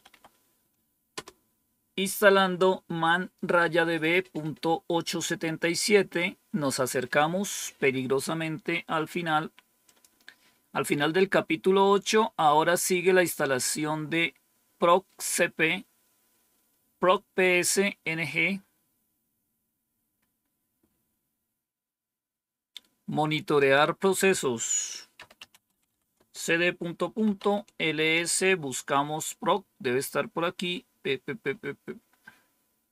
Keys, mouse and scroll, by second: 0.0-1.0 typing, 9.7 click, 23.4 click, 24.8-28.4 typing, 32.4-32.9 scroll up 1.